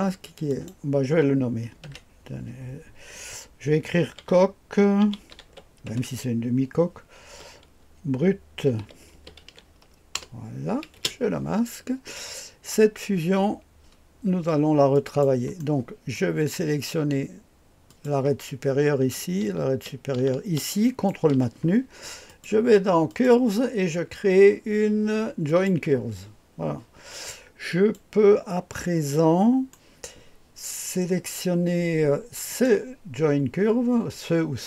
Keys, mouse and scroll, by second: 0.5 click, 1.8 F2, 3.8-7.3 typing, 8.3-11.4 typing, 14.9 click, 15.6-16.2 right drag, 17.9 click, 20.9 ctrl+click, 22.3 click, 23.1 click, 23.4 click, 25.5 click, 27.7 click, 29.1 click, 32.5 click.